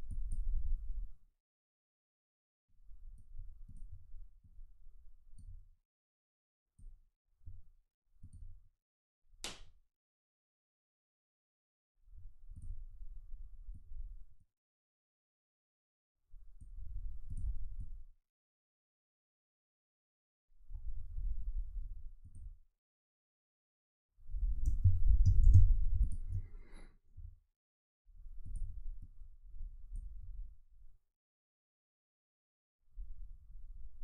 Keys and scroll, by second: 24.8 space.